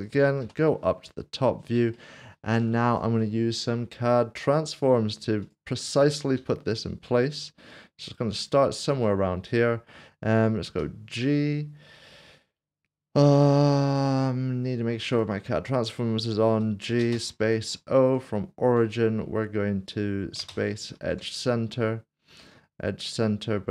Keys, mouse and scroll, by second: 0.4 KP_7, 1.3 scroll down 1, 1.9 shift+middle click, 4.8 click, 6.4 g, 8.3 click, 10.7 click, 16.5 g, 17.6 o, 18.1 click, 20.4 click, 21.0 typing.